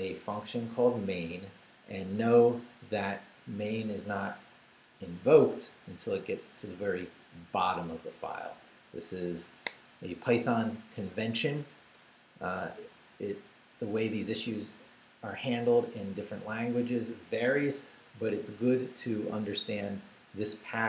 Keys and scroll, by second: 19.4 Left.